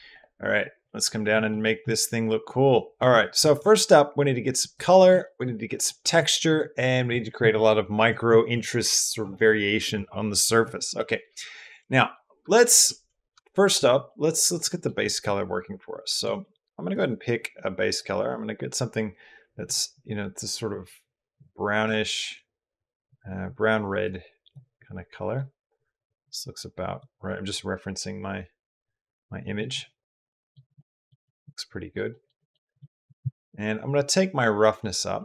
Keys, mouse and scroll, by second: 0.7 click, 1.3 click, 2.3 click, 4.5 click, 5.1 shift+click, 5.7 drag, 6.1 shift+click, 11.8 shift+click, 12.5 shift+click, 13.9 shift+click, 14.5 shift+click, 29.4-30.4 middle drag, 30.6-30.9 middle drag, 31.0-31.8 middle drag, 31.9 middle click, 32.2 middle click, 32.2 shift+click, 34.0-35.2 drag.